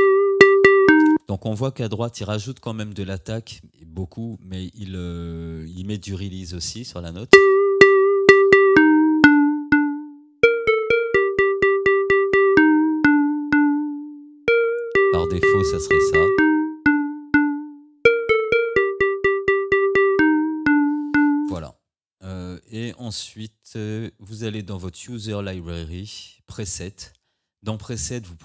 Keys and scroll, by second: 1.2 space, 7.3 space, 21.6 space.